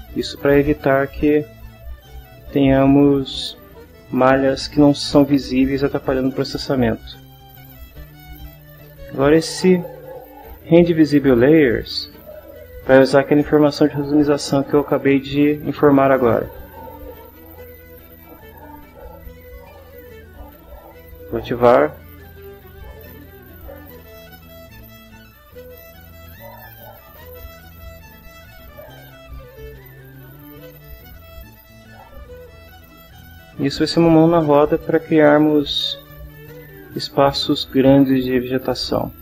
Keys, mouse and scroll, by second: 8.9 middle click, 22.1 click, 24.0-25.5 middle drag, 29.4-32.6 middle drag, 36.2 click, 38.1 middle click.